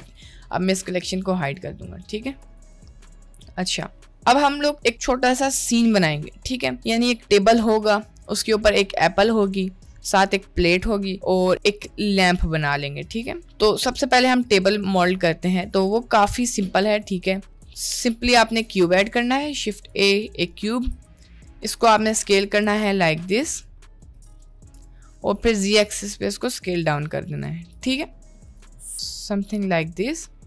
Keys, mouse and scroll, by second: 0.7 click, 1.4 click, 2.6 click, 3.0 middle click, 14.5 shift+middle click, 15.3-15.7 middle drag, 16.6 shift+middle click, 17.1 shift+middle click, 17.6 shift+a, 20.8 s, 22.1 middle click, 22.5 s, 25.5 s, 28.1 middle click, 28.5 s, 29.5-30.1 middle drag.